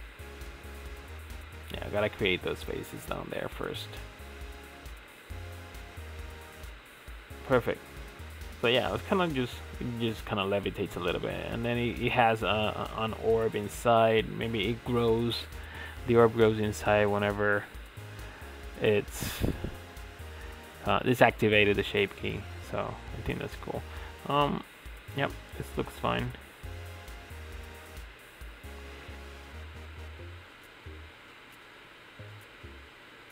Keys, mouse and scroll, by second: 0.3 click, 1.3 alt+click, 2.3 f, 3.6 f, 4.1 Tab, 5.0 click, 5.7-6.7 drag, 6.7 scroll down 2, 6.9-10.0 middle drag, 10.0-13.0 drag, 15.4 KP_Divide, 16.5-17.1 scroll down 5, 17.1 KP_Divide, 17.6 KP_Divide, 18.3 KP_Divide, 19.4 click, 19.7 scroll down 6, 20.0-21.0 shift+middle drag, 21.0-22.1 drag, 22.3-23.6 middle drag, 23.6-23.9 scroll up 7, 23.9-27.3 middle drag, 27.3-30.1 drag, 30.1 scroll down 4, 30.4-30.8 middle drag, 30.8 click, 31.2-31.6 shift+middle drag, 31.6 ctrl+s, 32.1-32.5 middle drag, 32.5 click, 32.8-33.2 shift+middle drag, 33.2 scroll down 4.